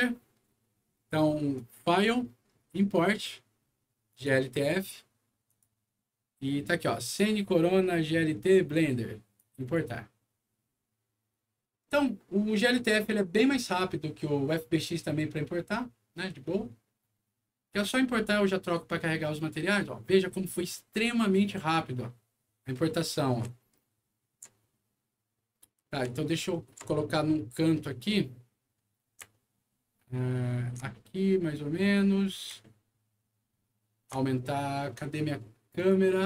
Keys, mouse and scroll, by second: 1.5 click, 4.1 click, 5.5 click, 6.1 scroll down 1, 7.0 click, 9.3 click, 19.7 scroll down 2, 20.2 scroll up 2, 20.7-23.2 middle drag, 23.6 shift+middle click, 24.6-25.7 shift+middle drag, 26.1 shift+middle click, 27.0 shift+middle click, 28.1 shift+middle click, 29.3-30.7 ctrl+middle drag, 30.9-32.4 ctrl+middle drag, 32.6-34.0 ctrl+middle drag, 35.7 ctrl+click.